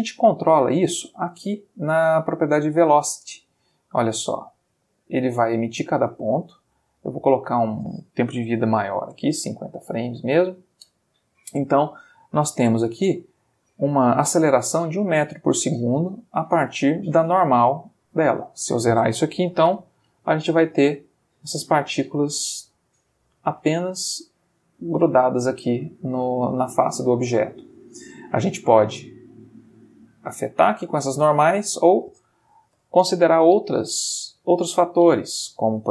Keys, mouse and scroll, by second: 0.5 middle click, 1.2 middle click, 2.6 click, 7.4 ctrl+click, 8.9 0, 9.3 g, 10.4 Return, 18.5 ctrl+click, 19.4 0, 19.7 Return, 29.7 click, 31.8 click, 32.8 0, 33.1 Return, 34.4 middle click, 35.6-35.9 ctrl+middle drag.